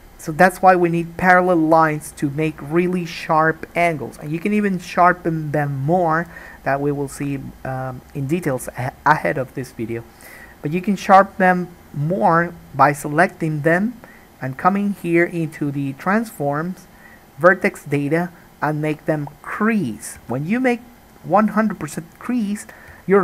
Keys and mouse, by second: 11.1 click, 11.2-19.4 middle drag, 19.4-23.2 drag.